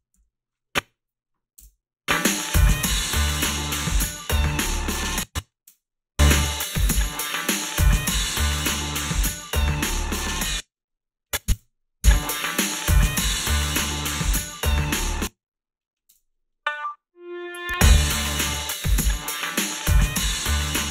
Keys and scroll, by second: 0.1 ctrl+r, 0.1 a, 1.6 space, 5.0 space, 5.7 space, 10.3 space, 11.5 space, 15.0 space, 16.1 space.